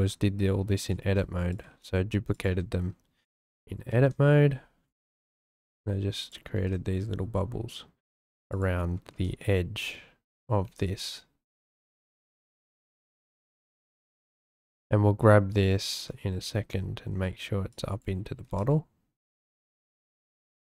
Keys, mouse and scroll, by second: 0.1 Tab, 1.0 shift+d, 1.7 s, 2.5 g, 3.2 click, 3.9 shift+d, 5.4 click, 5.6 s, 6.5 shift+d, 8.5 click, 9.1 shift+d, 10.3 click, 10.7 shift+d, 11.8 s, 12.6 g, 13.5 shift+click, 16.1 `, 17.7 click, 18.4 g, 18.4 z.